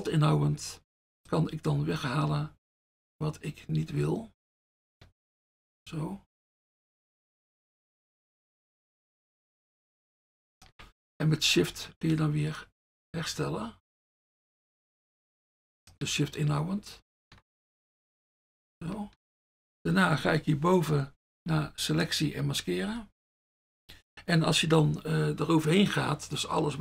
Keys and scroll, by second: 21.6 F1, 22.9 F1.